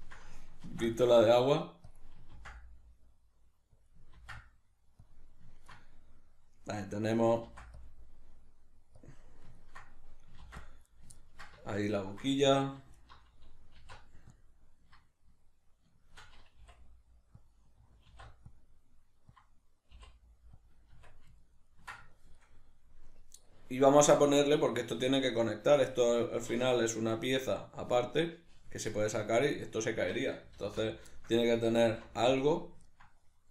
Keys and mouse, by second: 0.6 ctrl+r, 2.0 click, 2.4 ctrl+r, 3.9 click, 4.2 ctrl+r, 5.1 click, 5.8-9.1 middle drag, 7.4 ctrl+r, 9.1 click, 9.2-11.0 middle drag, 10.4 ctrl+r, 11.0 right click, 11.2-13.0 ctrl+middle drag, 12.5 3, 13.0 alt+right click, 13.8 alt+e, 16.2 shift+click, 17.5 click, 18.1 alt+e, 19.4 click, 20.7 click, 20.9 Tab, 21.4-33.5 ctrl+middle drag, 31.8 alt+q.